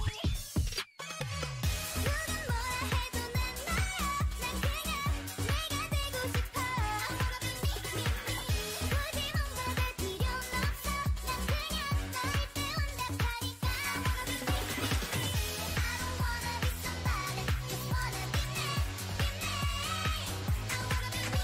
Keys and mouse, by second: 0.3 e, 1.9 a, 3.8 KP_1, 4.7 j, 6.1 l, 6.7 k, 13.9 a, 14.3-16.9 drag, 15.0 alt+m, 16.0 a, 17.0 click, 17.5 alt+m, 18.7 a, 19.5 alt+m, 20.3 a.